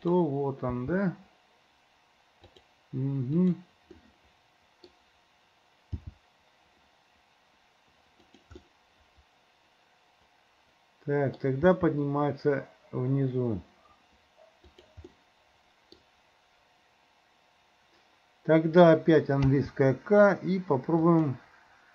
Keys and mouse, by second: 0.1 click, 0.8 g, 4.1 middle click, 6.1 g, 8.7-11.5 middle drag, 11.8 g, 15.3 middle click, 19.5 k.